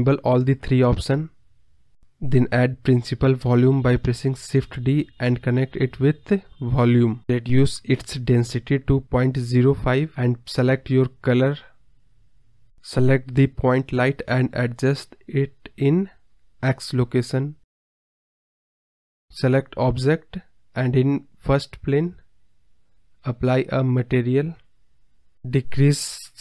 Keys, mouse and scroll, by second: 0.4 click, 0.6-1.0 drag, 4.9-7.3 drag, 7.3-10.3 scroll up 1, 11.5-11.8 scroll down 5, 11.8-12.2 scroll up 3, 12.2-12.9 scroll down 1, 12.9 click, 16.5 click, 18.3 click, 18.7-19.1 scroll up 6, 19.1-19.7 scroll down 2, 19.7-20.0 scroll up 1, 22.3 click, 23.0-25.1 drag.